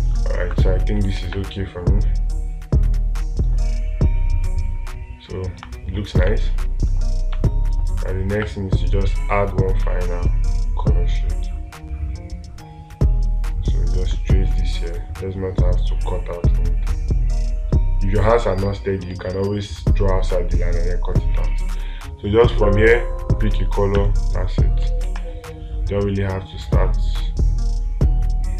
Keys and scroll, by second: 1.6 space, 6.6 space, 19.5 space, 25.5 space.